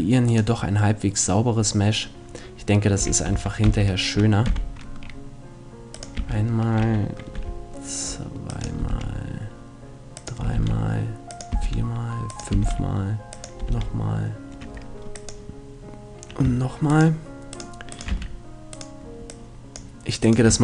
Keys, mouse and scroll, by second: 3.0 e, 6.0-7.8 drag, 6.2 e, 8.6-14.0 drag, 8.8 e, 10.4 e, 11.6 e, 12.5 e, 13.6 e, 16.8 click, 17.0-20.6 right drag, 18.1 f, 19.3-20.6 drag.